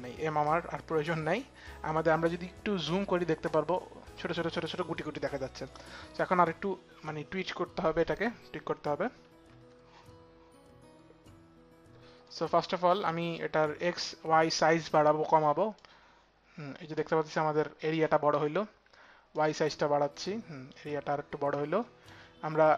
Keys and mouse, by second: 0.1 click, 3.5 click, 5.3 click, 15.3 click, 18.9 click, 19.7 click.